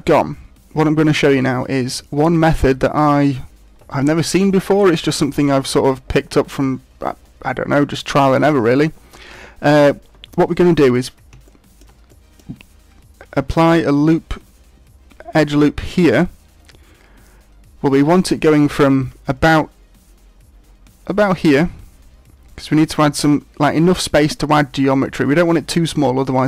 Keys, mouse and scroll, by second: 11.5 shift+middle click, 12.1 middle click.